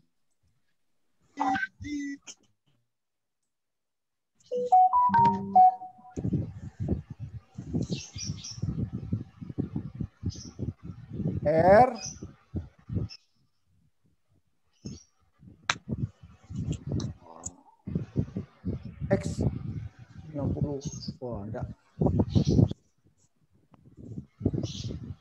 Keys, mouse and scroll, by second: 0.5 click, 4.9 x, 7.3 click, 7.8 click, 11.1 r, 21.8 x, 24.3 click.